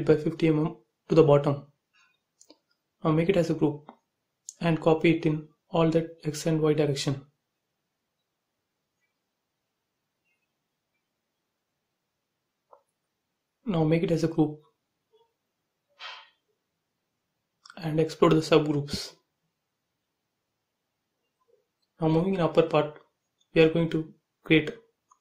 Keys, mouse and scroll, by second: 0.0-0.8 typing, 0.5 Return, 1.1 click, 1.2 click, 1.5 right click, 2.2 click, 3.1 m, 4.0 ctrl+click, 5.7 space, 6.6 shift+click, 7.5 m, 8.2 ctrl+click, 9.4 Left, 10.8 space, 11.0-11.3 scroll down 1, 11.9 shift+click, 15.0 right click, 15.9 click, 17.3 ctrl+a, 17.5 right click, 18.5 click, 19.7 middle click, 20.5 scroll down 1, 21.0 click, 21.9-24.2 typing, 22.0 click, 24.4 click, 25.0 ctrl+c.